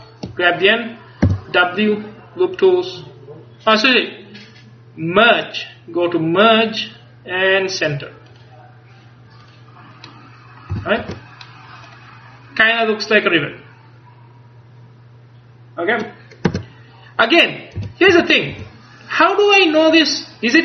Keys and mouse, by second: 1.3 w, 8.4-10.8 drag, 10.8 a, 11.1 Tab, 12.0 middle click, 16.6 Tab, 17.9 a, 18.2 Tab, 18.6 a.